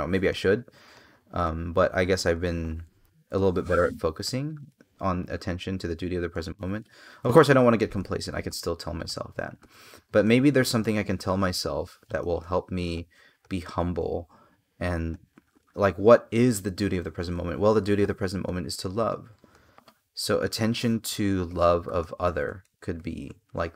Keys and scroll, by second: 0.1 space, 2.7 space, 21.2 space.